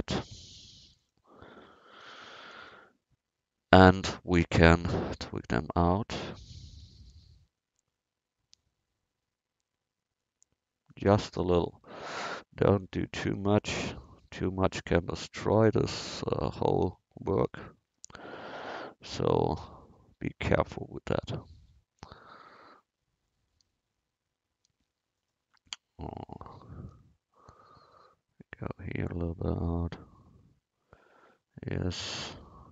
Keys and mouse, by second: 1.0-6.6 drag, 8.6-10.9 drag, 12.8-17.5 drag, 19.3-24.6 drag, 24.6 middle click, 25.2-27.9 drag, 27.9 middle click, 28.4-29.9 drag, 31.3 middle click, 32.0-32.7 drag.